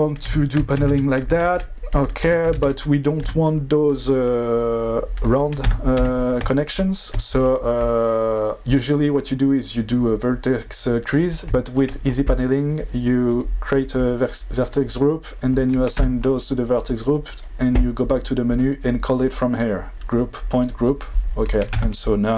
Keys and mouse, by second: 0.2 Tab, 1.0 alt+z, 1.4 alt+v, 2.2 Tab, 2.5 alt+z, 3.2 Tab, 5.6 Tab, 6.2 click, 6.2 1, 6.7 shift+click, 13.9 click, 14.6 click, 16.0 Tab, 16.7 click, 19.3-20.7 drag, 21.7 Tab.